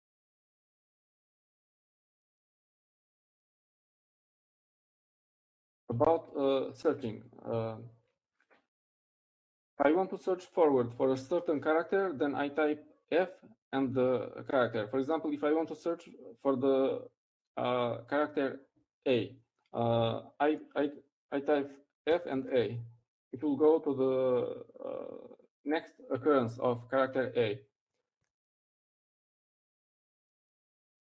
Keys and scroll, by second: 8.8 Up, 9.0 Up, 25.9-26.6 typing.